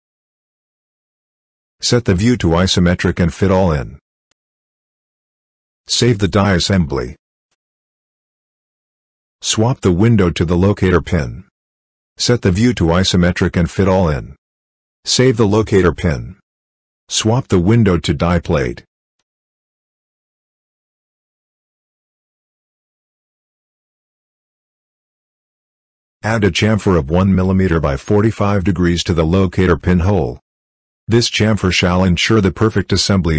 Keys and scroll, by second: 6.1 ctrl+s, 15.0 ctrl+s.